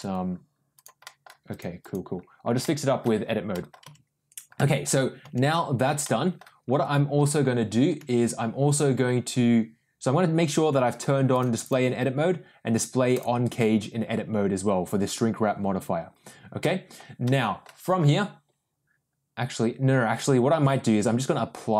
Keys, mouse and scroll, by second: 0.7 click, 1.0 middle click, 1.5 click, 1.8 click, 2.6 middle click, 3.5 middle click, 3.8 Tab, 4.5 middle click, 5.3 Tab, 6.0 middle click, 7.1 Tab, 8.0 Tab, 11.3 click, 11.6 click, 13.1 click, 16.6 middle click, 17.2 middle click, 17.4 middle click.